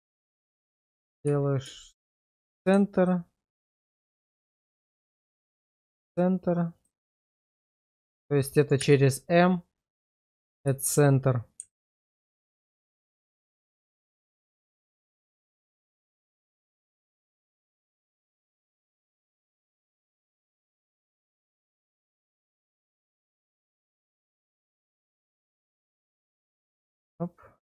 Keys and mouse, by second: 1.3 shift+1, 1.8 shift+middle click, 5.1 shift+1, 5.6 middle click, 7.7 click, 8.8 m, 10.8 shift+middle click, 11.8 alt+click, 13.9 shift+1, 14.4 shift+middle click, 16.7 shift+1, 17.1 shift+middle click, 20.3 shift+1, 20.8 shift+middle click, 21.5 middle click, 22.1 middle click, 23.5 click, 24.0 1, 25.5 click, 26.5 right click.